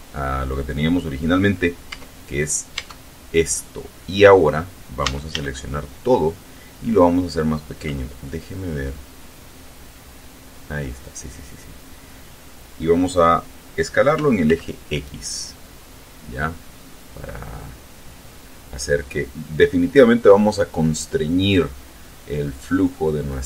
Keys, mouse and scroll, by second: 2.0 Tab, 2.9 Tab, 3.7 middle click, 5.2 a, 8.4-12.8 middle drag, 14.3 s, 14.6 x, 21.2 click, 21.8-23.2 middle drag.